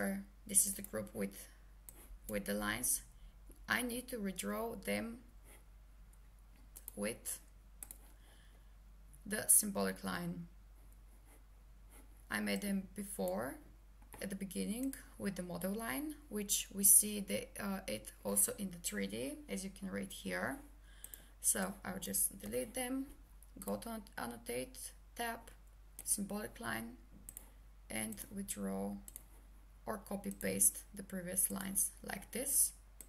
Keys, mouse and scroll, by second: 6.8 click, 22.5 Delete, 23.7 click, 31.5 click.